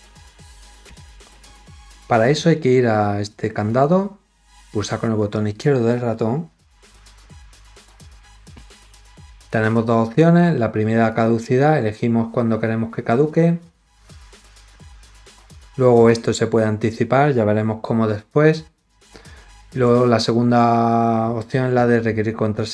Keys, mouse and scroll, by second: 3.6 click, 11.0 click, 14.3 click.